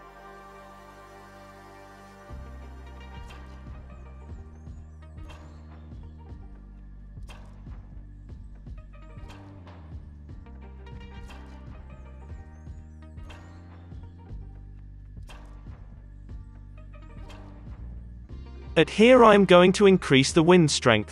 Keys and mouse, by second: 2.0 space, 2.6 space, 3.3 space, 4.7-7.7 middle drag, 5.8 space, 6.7 space, 7.0 Up, 7.3 space, 9.0 space, 10.5 Up, 11.0 KP_3, 12.5-13.9 drag, 12.6 shift+d, 14.2 space, 15.5 space, 15.9-17.8 drag, 16.3 space, 17.8 space, 18.4 Up, 18.9 Up, 18.9 Down, 20.3 KP_0, 20.4 KP_0.